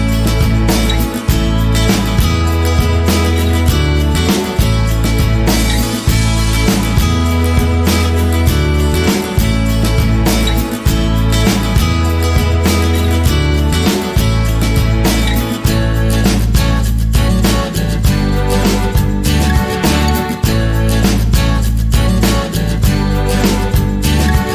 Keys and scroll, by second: 24.0 ctrl+0.